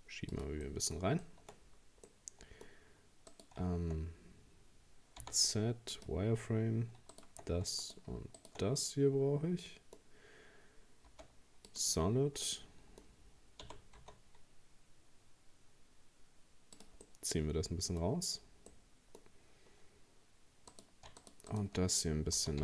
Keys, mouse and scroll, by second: 0.7 middle click, 1.5-2.1 scroll up 1, 2.1-3.3 middle drag, 3.3 right click, 5.2 z, 7.1 shift+right click, 7.8 shift+right click, 8.4 shift+right click, 8.8-11.1 middle drag, 11.1 z, 12.1-12.5 scroll down 4, 12.5-13.6 middle drag, 13.6 g, 17.1-18.1 middle drag, 18.1 scroll up 1, 18.7 scroll up 2, 18.7-20.7 middle drag, 20.7 right click, 21.2 shift+right click, 21.5 shift+right click, 22.4 g.